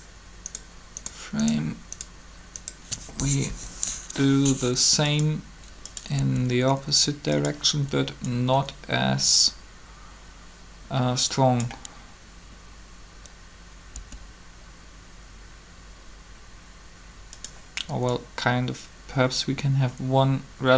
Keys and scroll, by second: 3.4 shift+1, 6.2 r, 13.9 r.